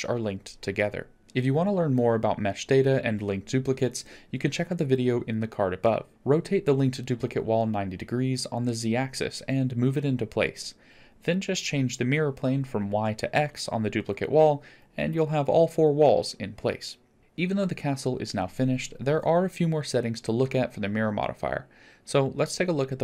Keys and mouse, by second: 1.2 Tab, 1.6 middle click, 5.2 r, 7.6 KP_7, 9.0 g, 15.6 click, 16.4 click, 17.2 click, 18.9 drag, 20.0 middle drag, 20.8 click.